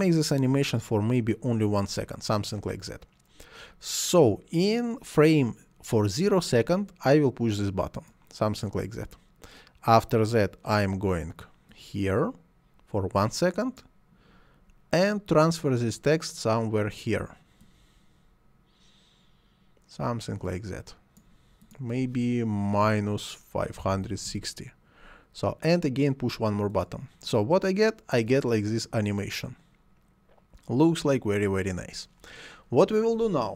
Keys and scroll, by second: 22.8-24.5 typing.